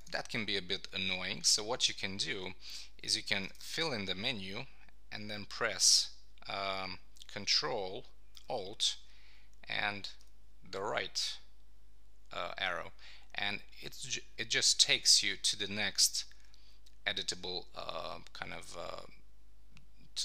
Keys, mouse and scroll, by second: 3.3 shift+h, 10.2 ctrl+alt+Right.